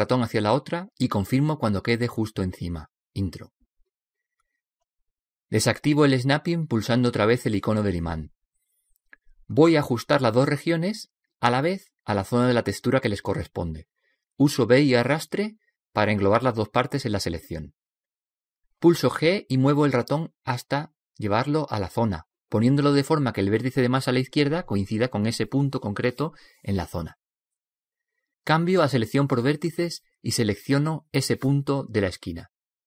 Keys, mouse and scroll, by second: 6.9 click, 15.2 b, 19.6 g, 30.0 click, 31.6 middle click, 31.8 right click.